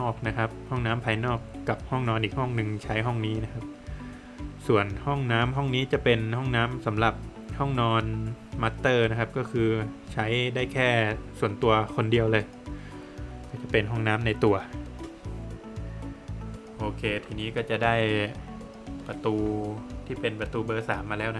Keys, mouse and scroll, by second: 0.3 Return, 2.1 Return, 4.2 space, 5.8 space, 5.9 click, 7.5 click, 8.6 click, 10.7 Return, 12.4 Return, 13.7 scroll down 1, 14.0 middle click, 14.7-15.1 scroll down 2, 15.7 click, 16.1 double click, 18.2 space, 19.6 click.